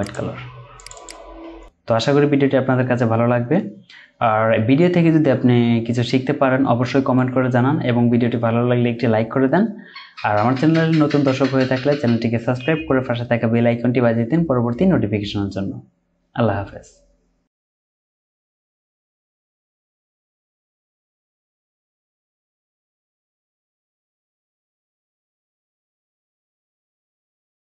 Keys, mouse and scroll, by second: 0.9 double click.